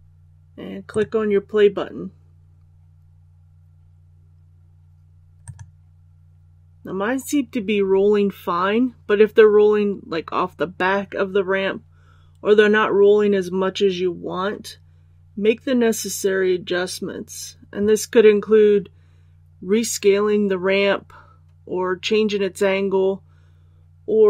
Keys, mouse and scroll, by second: 0.8 click.